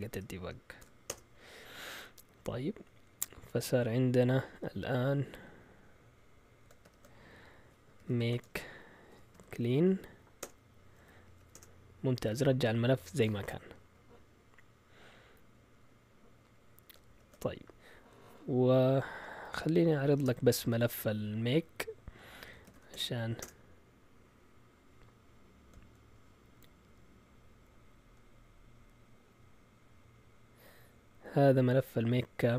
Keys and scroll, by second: 0.0-1.5 typing, 6.8 ctrl+l, 7.7-11.8 typing, 10.4 Return, 17.0 ctrl+l, 19.2-20.1 typing, 22.2-23.2 typing, 23.4 Return.